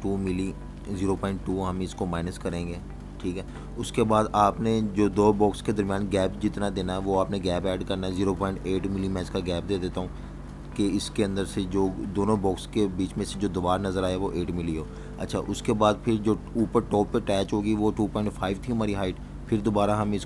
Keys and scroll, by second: 0.5-1.6 typing, 2.2 Return, 7.9 0, 8.2 ., 9.4 8, 10.5 Return.